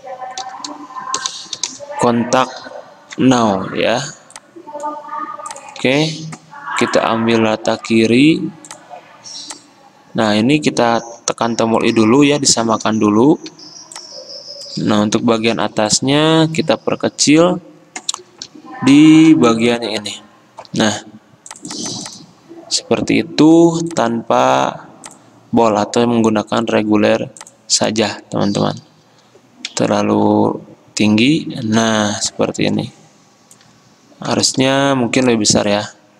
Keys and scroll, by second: 0.0-1.9 typing, 5.7-6.4 typing, 11.1 i, 13.6 v, 15.4 t, 18.6 ctrl+t, 29.9 alt+Up, 30.4 alt+Down, 30.5 alt+Down, 34.7 t.